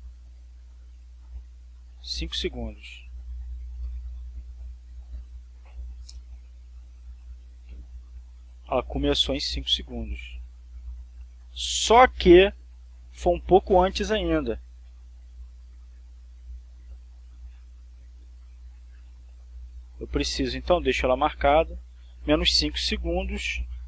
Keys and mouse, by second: 3.2 click, 4.1-5.1 typing, 6.6 Return, 8.2-20.5 drag, 22.0 click.